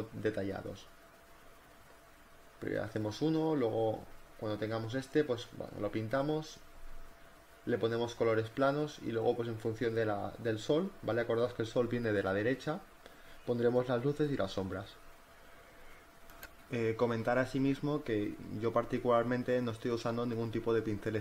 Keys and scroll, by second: 1.8 e, 2.1 ctrl+alt+z, 2.5 space, 2.6 b, 3.8 z, 4.1 space, 4.4 z, 4.7 b, 6.0 ], 6.5 [, 7.1 b, 11.7-12.8 typing, 15.7 z, 16.2 b.